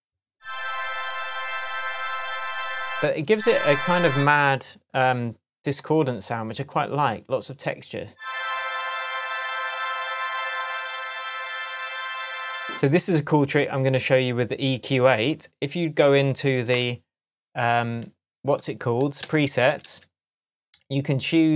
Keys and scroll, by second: 19.2 Down.